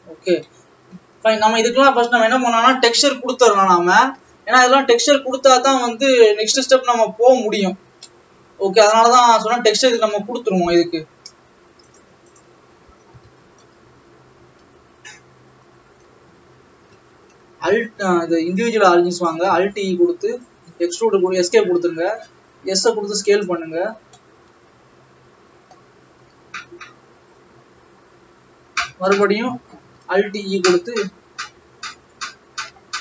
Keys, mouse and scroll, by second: 0.9 scroll down 1, 1.1 middle click, 2.0 ctrl+s, 5.3 click, 5.8 scroll down 2, 6.2-7.4 middle drag, 7.4 scroll up 3, 7.7-8.3 scroll down 4, 8.3-9.5 middle drag, 9.5-10.6 scroll up 4, 10.6-11.9 scroll up 1, 11.9 click, 13.4 e, 14.4 s, 17.1 ctrl+z, 18.6-19.9 drag, 19.9 alt+e, 21.7 s, 23.8-25.0 scroll up 6, 25.0-28.4 middle drag, 30.2 alt+e.